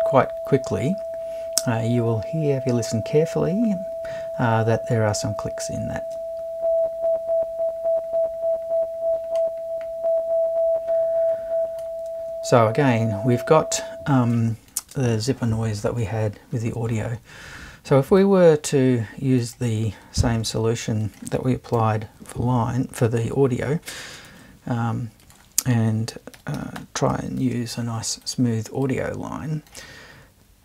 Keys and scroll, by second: 21.8 BackSpace, 24.3 super+1, 26.1-27.9 typing.